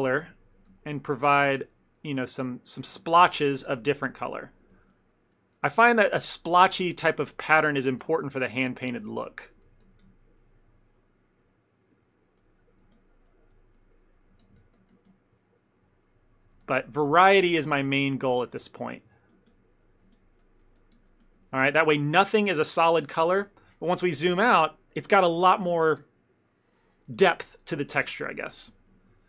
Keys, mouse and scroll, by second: 0.0 f, 0.3 ctrl+middle click, 0.7 f, 1.4 click, 1.5 click, 1.7 click, 2.0 click, 2.0 middle click, 2.3 middle click, 2.4 ctrl+middle click, 2.7 click, 2.9 click, 3.3 f, 3.6 click, 3.8 click, 3.9 click, 4.2 middle click, 4.5 middle click, 4.8 shift+middle click, 5.0 ctrl+middle click, 5.4 click, 5.6 click, 6.1 shift+middle click, 8.0 f, 8.3 click, 8.5 click, 9.2 click, 9.3 middle click, 9.7-10.1 ctrl+click, 9.9 ctrl+click, 10.5 ctrl+middle click, 10.6 middle click, 11.0 middle click, 11.1 ctrl+middle click, 11.5 shift+middle click, 11.6 shift+middle click, 11.9 ctrl+middle click, 12.1 ctrl+middle click, 12.5 click, 12.7 click, 12.9 f, 13.4 click, 13.6 click, 14.0 click, 14.4 f, 14.7 ctrl+click, 14.8 ctrl+click, 14.8 click, 15.2 click, 15.5 middle click, 16.0 shift+middle click, 16.3 middle click, 16.6 f, 16.9 click, 17.1 click, 18.1 middle click, 18.9 f, 19.2-19.6 ctrl+click, 19.3 ctrl+click, 19.4 click, 19.9 middle click, 20.1 f, 20.5 click, 20.7 click, 21.2 click, 21.3 ctrl+click, 21.5 ctrl+click, 21.5 ctrl+middle click, 21.8 middle click, 22.2 middle click, 22.8 middle click, 23.0 ctrl+middle click, 23.4 middle click, 23.6 shift+middle click, 23.7 shift+middle click, 23.8 ctrl+middle click, 24.0 ctrl+middle click, 24.3 middle click, 24.9 ctrl+middle click, 25.2 ctrl+middle click, 28.6 ctrl+middle click, 28.9 middle click, 29.1 middle click, 29.2 ctrl+middle click.